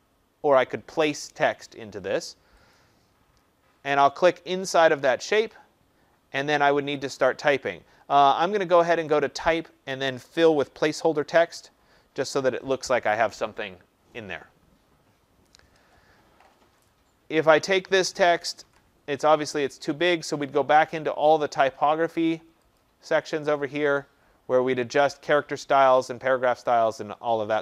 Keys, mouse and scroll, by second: 2.7 click, 4.8 click, 9.2 click, 11.5 click, 16.8 click, 18.6 ctrl+a, 21.4 click, 22.7 click.